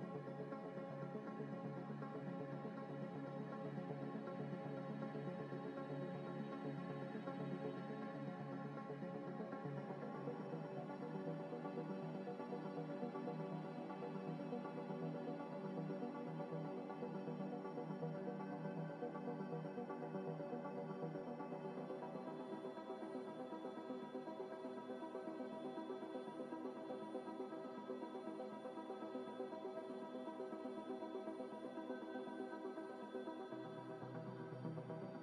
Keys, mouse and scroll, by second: 0.9 double click, 8.1-8.8 scroll down 1, 10.4 double click, 15.5 ctrl+z, 17.8 middle click, 18.5 scroll down 1, 22.9 scroll up 1, 26.2 g, 27.0 ctrl+z, 27.9 z, 28.2 middle click, 29.2 shift+click, 31.4 shift+click, 31.5 shift+click, 33.6-34.6 scroll down 1, 34.6-35.1 scroll up 1.